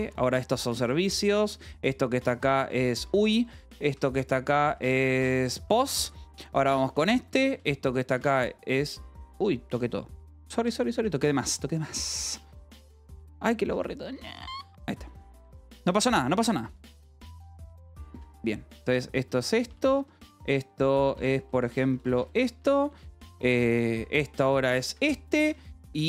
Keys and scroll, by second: 0.0-11.1 typing, 10.9 Escape, 12.8 j, 13.3 u, 14.5 j, 15.9-26.0 typing, 21.1 Escape, 24.8 Escape.